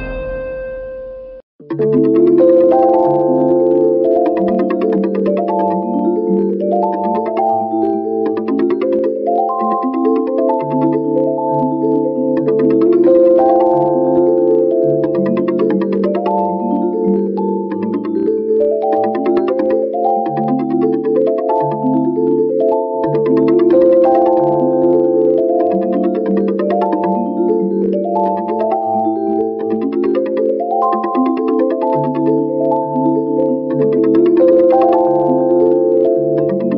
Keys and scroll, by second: 0.0 ctrl+-, 2.7 space, 3.7 v, 7.6 ctrl+t, 9.6 alt+shift+Return, 10.9 ctrl+-, 11.7 v, 13.8 t, 18.8 shift+m, 20.9 a, 22.2 c, 24.2 ctrl+a, 28.0 v, 33.1 t, 34.5 ctrl+a, 35.3 shift+w, 36.2 o.